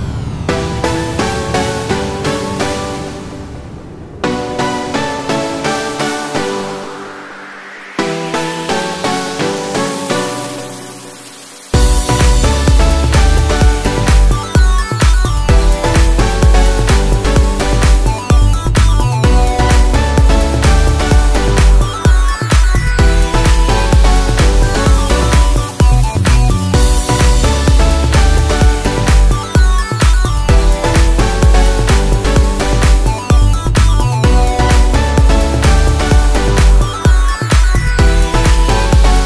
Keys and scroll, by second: 9.9 ctrl+t, 33.2 ctrl+t, 34.8 ctrl+=.